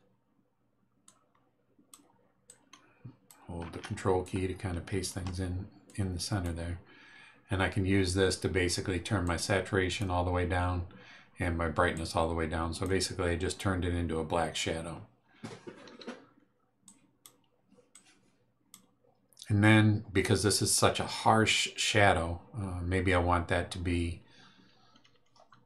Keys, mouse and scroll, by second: 1.0-2.1 drag, 2.4-3.4 drag, 4.2-5.2 ctrl+drag, 5.8 click, 9.2 click, 11.9-13.0 drag, 16.8 click, 17.9 click.